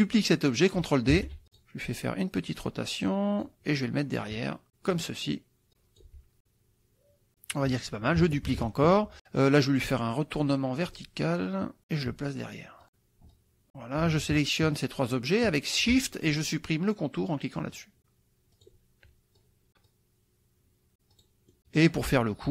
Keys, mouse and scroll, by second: 1.2 ctrl+d, 1.6 click, 2.5-3.6 drag, 3.8 click, 4.9 click, 5.7 click, 6.4-7.8 drag, 8.5 ctrl+d, 10.8 click, 11.5 click, 13.3 click, 14.3 shift+click, 15.0 shift+click, 17.6 click, 18.6 click, 19.4 click, 20.0 click, 21.2 click, 21.8 click.